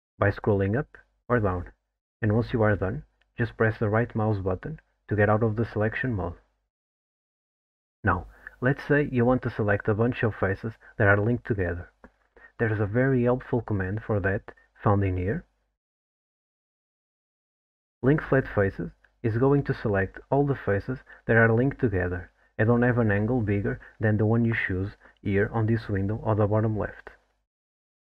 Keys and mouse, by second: 11.4 3, 15.9-18.1 drag, 20.5 alt+middle click, 21.1-25.6 middle drag.